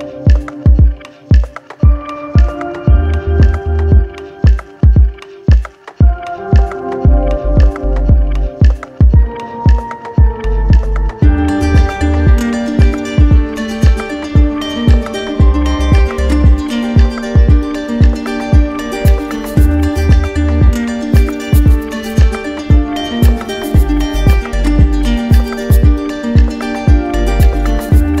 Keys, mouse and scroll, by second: 0.8 alt+click, 2.3 alt+click, 3.2 click, 4.1 alt+click, 5.0 click, 5.7 alt+click, 10.0 alt+click, 11.3 ctrl+click, 12.9 ctrl+click, 24.2 ctrl+click, 27.6 ctrl+z.